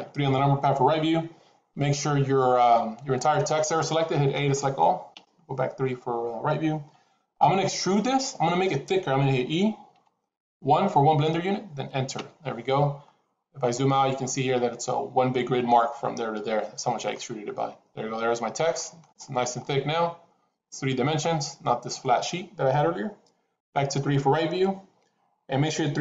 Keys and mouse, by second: 2.7 middle click, 4.2 a, 5.0 KP_3, 9.8 e, 17.0-18.9 middle drag, 19.5-22.0 middle drag, 23.5 KP_3.